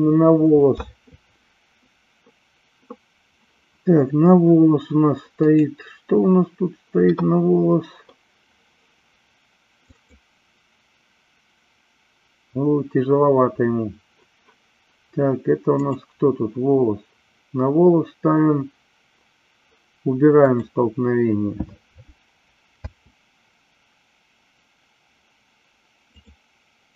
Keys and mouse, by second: 15.8 click, 20.5 click, 22.8 space.